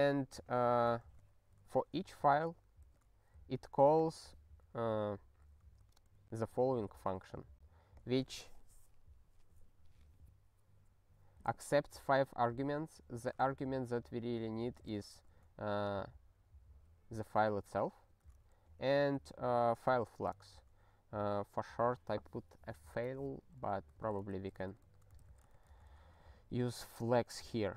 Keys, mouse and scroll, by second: 0.5 ctrl+a, 1.1 ctrl+alt+@, 2.8 ctrl+g, 4.0 click, 5.8 ctrl+b, 5.9 ctrl+b, 8.0 click, 13.4 alt+f, 14.8 ctrl+space, 15.2 ctrl+b, 18.1 ctrl+g, 18.5 alt+f, 19.3 alt+f, 23.6-25.8 typing, 24.5 ctrl+b, 24.7 ctrl+b.